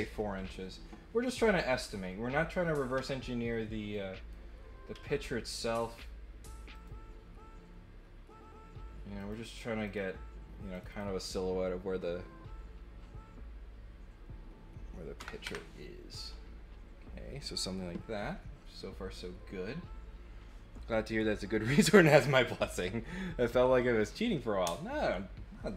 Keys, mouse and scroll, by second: 1.5 right click, 3.9 right click, 6.7 click, 9.2 click, 9.8 click, 10.7 click, 10.8 click.